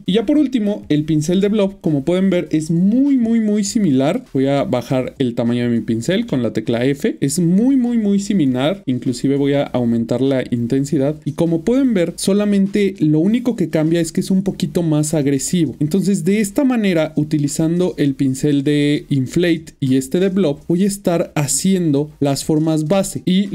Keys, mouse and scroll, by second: 0.8 click, 2.0 middle click, 3.8 f, 4.3 click, 6.1 f, 12.2 shift+middle click, 13.6 click, 13.7 double click, 14.3 click, 15.8 double click, 16.0 double click, 16.4-17.8 double click, 19.2 click, 19.8 middle click, 20.8 ctrl+middle click.